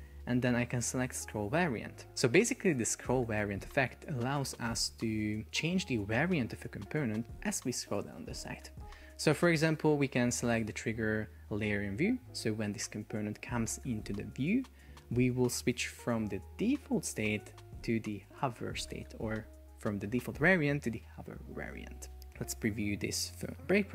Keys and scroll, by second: 23.6 super+p.